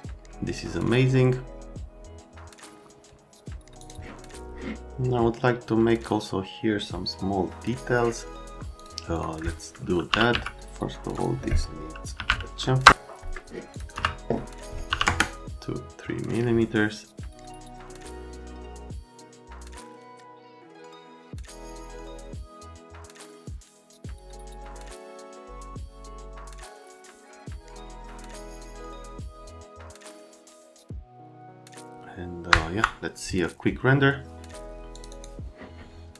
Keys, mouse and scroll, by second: 3.8 click, 8.8 click, 9.1 click, 9.8-10.8 typing, 11.9-12.7 typing, 12.9 Return, 13.7 click, 13.9 click, 13.9 2, 14.9 n, 15.1 KP_Enter, 17.2 click, 17.3 right click, 17.5 F3, 17.6 F3, 17.6 right click, 18.1 click, 18.2 middle click, 18.3 F3, 18.5-19.3 typing, 18.6 click, 19.4 click, 19.6 ctrl+click, 19.7 middle click, 19.8 ctrl+click, 20.0 ctrl+click, 20.0 middle click, 20.3 click, 20.4 middle click, 20.6 click, 20.9 click, 21.4 click, 21.7 middle click, 22.1 middle click, 22.2 F3, 22.7 click, 23.6 click, 23.9 p, 24.1 Down, 24.2 Down, 24.5 click, 24.7 scroll down 2, 25.0 click, 25.3 F3, 25.5 scroll down 1, 25.7 ctrl+scroll up 1, 25.8 scroll down 1, 25.8 ctrl+scroll up 2, 26.1 click, 26.2 right click, 26.3 click, 26.4 right click, 26.5 click, 26.6 click, 26.8 click, 26.9 ctrl+click, 27.0 right click, 27.0 right click, 27.1 ctrl+click, 27.2 right click, 27.4 ctrl+click, 27.5 ctrl+click, 27.8 click, 28.3 click, 28.5 ctrl+click, 28.6 ctrl+click, 28.7 right click, 29.0 right click, 29.2 alt+middle click, 29.3 right click, 29.5 alt+middle click, 29.7 right click, 29.8 alt+middle click, 30.1 middle click, 30.2 right click, 30.8 click, 31.0 click, 31.1 middle click, 31.2 F3, 31.4 x, 31.6 right click, 31.7 click, 32.5 F9, 34.9 click, 35.1 click.